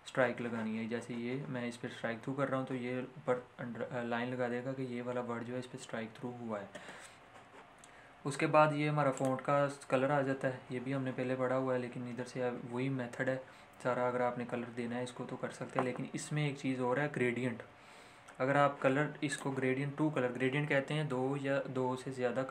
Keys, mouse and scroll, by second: 9.2 click, 19.3 click.